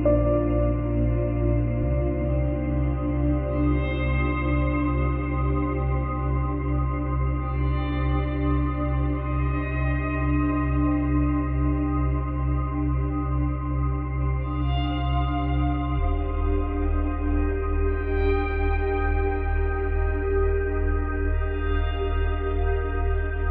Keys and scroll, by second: 1.8 ctrl+z.